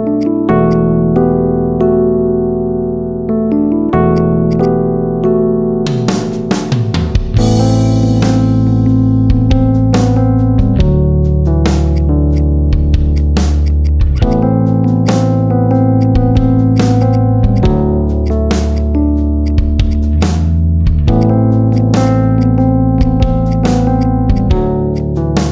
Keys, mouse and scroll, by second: 0.1-1.1 drag, 1.1 shift+middle drag, 1.4 scroll up 5, 1.6-2.2 middle drag, 2.2 scroll up 1, 2.3-3.1 shift+middle drag, 3.1 Tab, 4.1 click, 4.4 alt+shift+click, 5.1 scroll down 2, 5.1-6.2 middle drag, 6.2 scroll up 1, 6.3-8.7 middle drag, 9.9-11.4 middle drag, 11.9 click, 12.3 click, 13.1-13.6 drag, 13.7 click, 14.1 alt+shift+click, 14.9 alt+shift+click, 15.5 ctrl+z, 15.9 click, 16.5 click, 17.1 alt+shift+click, 17.5 click, 18.1 alt+shift+click, 18.7 click, 19.3 shift+click, 19.7 shift+click, 20.1 shift+click, 20.5 ctrl+z, 20.7 ctrl+z, 21.1 shift+click, 21.9 shift+click, 22.3 shift+click, 22.7 shift+click, 23.3 shift+click, 23.9 shift+click, 24.3 shift+click, 24.8 shift+click, 25.1 shift+click.